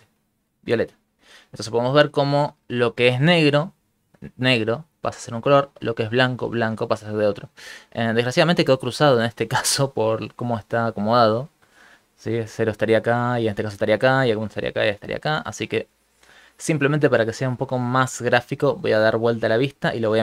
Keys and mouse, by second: 7.8 shift+middle click, 8.6 shift+middle click, 9.1 click, 9.7 space, 10.6 space, 11.2 click, 11.2 space, 11.6 click, 12.6 click, 13.3 click, 14.2 click, 14.9 click, 15.7 ctrl+click, 17.8 ctrl+click, 18.7 middle click.